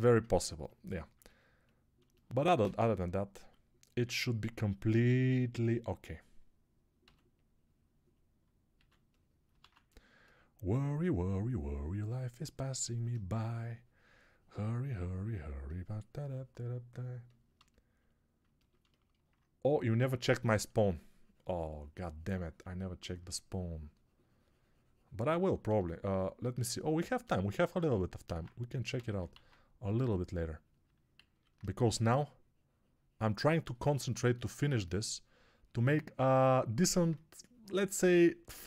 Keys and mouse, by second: 2.6 alt+shift+click, 2.6 alt+shift+middle click, 2.6 alt+shift+right click, 2.8 alt+click, 2.8 alt+middle click, 2.8 alt+right click, 3.5 alt+q, 6.9 s, 8.1-9.8 drag, 8.1-9.8 middle drag, 8.1-9.8 right drag, 8.6 s, 9.8 alt+q, 28.2 alt+q, 28.8 s, 29.2 alt+q, 31.4-34.3 drag, 31.4-34.3 middle drag, 31.4-34.3 right drag.